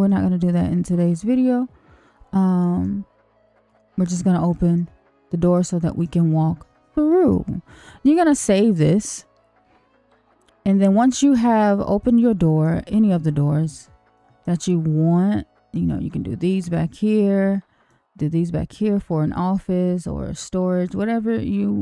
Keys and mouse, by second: 0.0 click, 0.5-2.8 middle drag, 3.6 Tab, 4.5 middle click, 5.5 middle click, 7.7 middle click, 8.4 ctrl+s, 11.0 middle click, 12.0 middle click, 12.9 middle click, 13.7 shift+middle click, 14.4-15.7 middle drag, 16.7-17.9 middle drag, 18.7-21.8 middle drag.